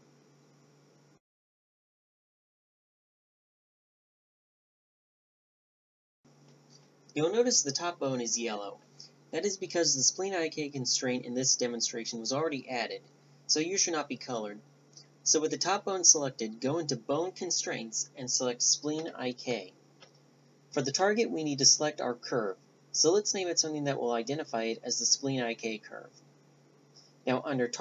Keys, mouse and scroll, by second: 4.8-7.1 right drag, 8.6-13.2 drag, 8.6-13.2 right drag, 14.5-21.1 drag, 14.5-21.1 right drag, 22.3 click, 22.3 right click, 22.8 click, 23.4-27.8 right drag, 23.9-27.8 drag.